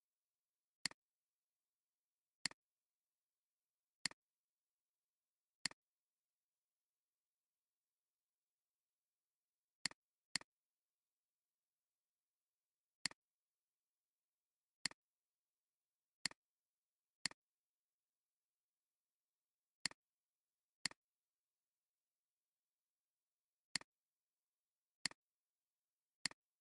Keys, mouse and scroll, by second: 0.6 space, 7.1-8.2 drag, 10.0 click, 13.6 Up, 13.8 Up, 13.9 Up, 14.2 Up, 14.4 Up, 14.6 Up, 15.8 alt+scroll down 1, 16.2 space, 16.4 alt+scroll down 1, 17.2 alt+click, 21.8 Up, 22.0 Up, 22.2 Up, 22.4 Up, 22.6 Up, 22.8 Up, 25.4 Up, 25.6 Up.